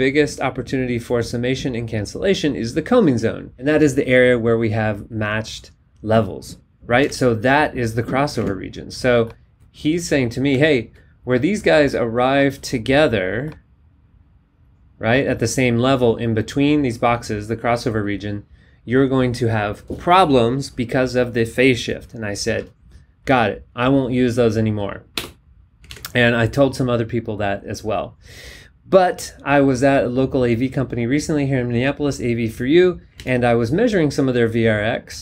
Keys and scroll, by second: 7.1 super+Tab, 8.4 alt+Tab, 25.1 BackSpace, 25.9 alt+Tab, 33.1 super+Tab.